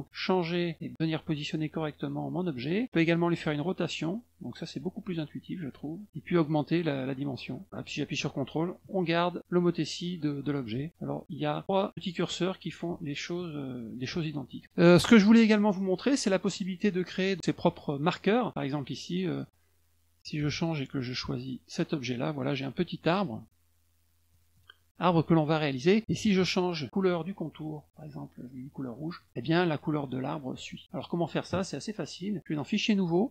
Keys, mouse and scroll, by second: 0.1-2.6 drag, 3.1-5.4 drag, 6.0 click, 6.4-10.2 drag, 11.4 click, 11.9 click, 12.6-14.3 ctrl+drag, 15.7 middle click, 16.5 middle click, 18.1 middle click, 18.8 click, 20.2 click, 21.4 click, 22.8 click, 23.2 click, 24.3 click, 24.9 click, 28.9 middle click, 30.7 middle click, 32.2 click, 32.5 click.